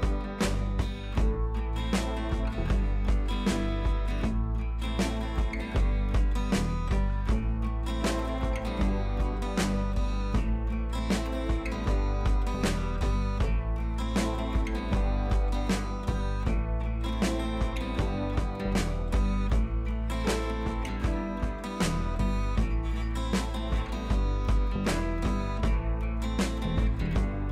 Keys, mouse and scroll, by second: 0.1 click, 1.0 alt+click, 2.2 ctrl+z, 3.0 click, 5.3-13.3 alt+drag, 14.6 click, 15.3 scroll up 1, 16.9-25.9 drag, 25.9 ctrl+c.